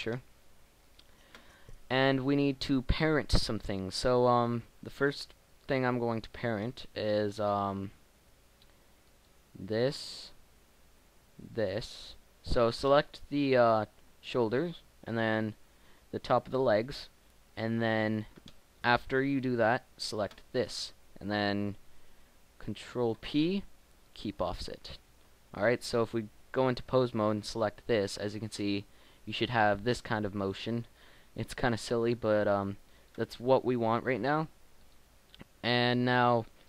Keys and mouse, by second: 2.8 middle click, 9.1 right click, 23.2 ctrl+p, 25.0 Tab, 27.3 g, 29.0 middle click, 33.1 click, 33.7 Tab.